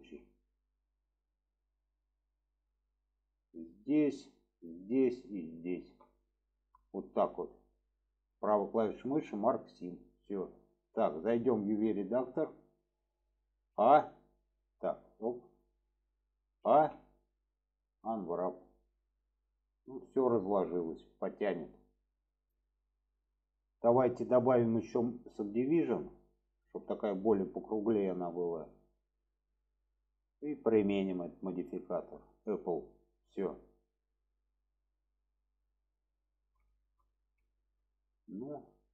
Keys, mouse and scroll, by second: 0.2-2.4 middle drag, 2.7-3.7 middle drag, 4.5 shift+click, 5.4 alt+shift+click, 6.1-6.7 middle drag, 7.2 middle drag, 8.3 right click, 9.6 click, 10.1-11.0 middle drag, 22.3 click, 23.1-23.5 middle drag, 24.2-25.7 drag, 26.1-29.7 middle drag, 30.9-32.5 drag, 32.9 click, 33.7-35.0 middle drag, 35.5 middle click, 36.6 shift+middle drag, 37.4 shift+middle click, 38.3 shift+middle drag.